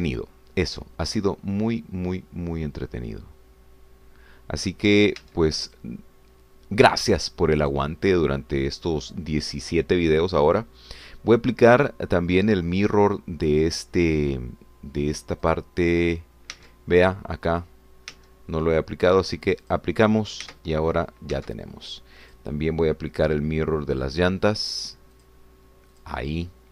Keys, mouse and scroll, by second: 0.6 shift+Tab, 6.3 Tab, 6.7 click, 8.6 click, 16.6 click, 17.6 Tab, 19.2 Tab, 20.7 click, 21.5 Tab, 22.4 Tab, 23.2 click, 26.2 click.